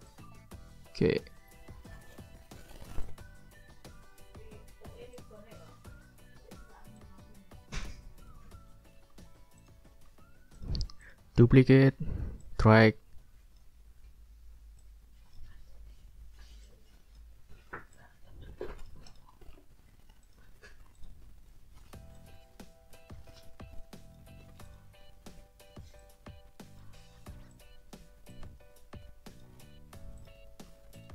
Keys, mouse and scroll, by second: 0.1-2.1 drag, 3.0 ctrl+click, 5.1 ctrl+click, 6.3 ctrl+scroll down 2, 7.0-8.5 ctrl+drag, 8.7 ctrl+middle click, 9.3 ctrl+scroll down 1, 9.6 ctrl+click, 9.9 ctrl+middle click, 10.5 click, 11.0 shift+click, 11.8 ctrl+d, 12.4-13.8 ctrl+drag, 14.8 ctrl+click, 17.5 ctrl+scroll up 2, 17.9 ctrl+click, 18.6-19.7 drag, 20.2 ctrl+click, 20.5 ctrl+scroll up 1, 20.9 ctrl+click, 22.1-24.3 drag, 24.6 click, 26.0-27.0 drag, 27.5 click, 28.3-29.6 drag, 29.8 ctrl+scroll down 2, 30.2 ctrl+click, 30.5 ctrl+click, 30.9 ctrl+click.